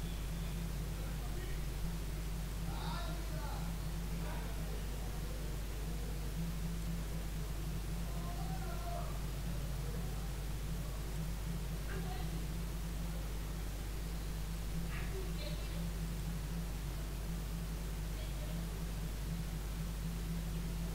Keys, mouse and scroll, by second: 2.5-5.6 drag, 5.6-6.8 middle drag, 6.8-10.1 drag, 11.4-11.8 scroll down 3, 11.8-16.2 middle drag, 16.2-17.4 drag, 17.4-17.9 scroll up 2, 17.9-20.9 middle drag.